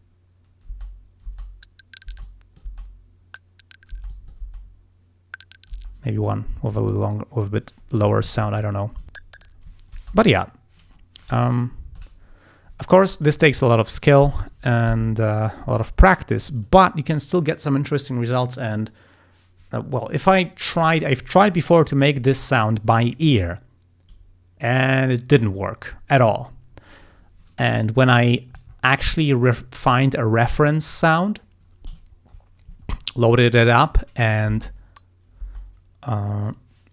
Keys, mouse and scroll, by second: 0.7 space, 2.2 space, 2.3 click, 4.0 space, 4.1 click, 5.8 space, 6.2 scroll up 1, 6.6 scroll down 2, 6.9 ctrl+scroll up 2, 7.5-8.5 ctrl+scroll down 6, 8.6 ctrl+scroll up 2, 9.1 space, 9.8 ctrl+scroll down 2, 10.1 ctrl+space, 11.4 ctrl+scroll up 2, 15.0 g, 15.4 click, 15.8 ctrl+scroll up 2, 16.1 ctrl+scroll down 2, 16.6 ctrl+click, 28.0-28.5 ctrl+scroll down 4, 28.7 ctrl+scroll up 2, 29.2 scroll down 2, 32.1 ctrl+scroll down 2, 32.8 ctrl+scroll up 2, 33.7 ctrl+scroll up 2, 34.3 ctrl+click, 34.5 ctrl+space, 35.5 space.